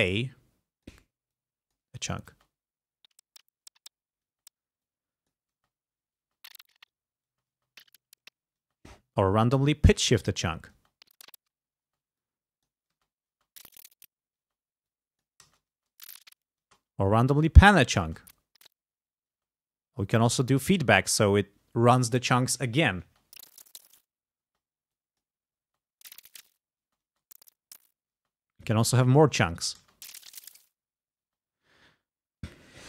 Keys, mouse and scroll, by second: 1.4 click, 2.4 space, 4.3 space, 4.9 click, 5.6 space, 6.3 space, 7.4 space, 8.7 space, 10.0 click, 10.8 space, 11.9 space, 12.2 click, 13.0 space, 14.5 space, 14.9 click, 15.5 space, 16.7 space, 17.3 click, 18.1 space, 19.4 space, 20.0-21.1 drag, 23.1 space, 24.5 space, 25.0 click, 25.7 space, 27.0 space, 28.2 space, 28.7 click, 29.9 space, 31.3 space.